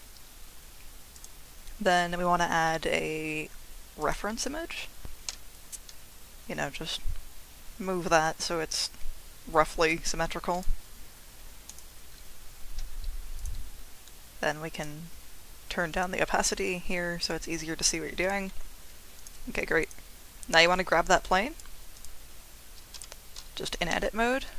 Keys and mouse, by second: 5.3 g, 10.5 click, 14.7 click, 15.9 click, 16.5-17.9 drag, 18.2 click, 19.2 click, 19.6-19.9 drag, 21.2-21.7 drag, 23.1 Tab, 23.9 g.